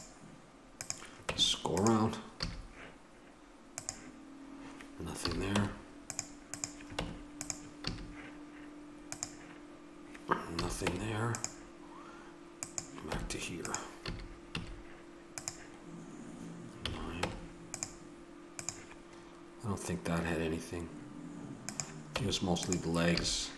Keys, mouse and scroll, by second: 1.2 Tab, 2.4 a, 5.2 a, 5.5 Tab, 6.9 Tab, 7.8 a, 10.6 a, 10.8 Tab, 13.1 Tab, 14.0 a, 14.5 a, 16.8 a, 17.1 middle click, 17.2 Tab, 17.3-18.6 middle drag, 19.9 right click, 21.8 right click, 22.1 Tab, 23.1 a.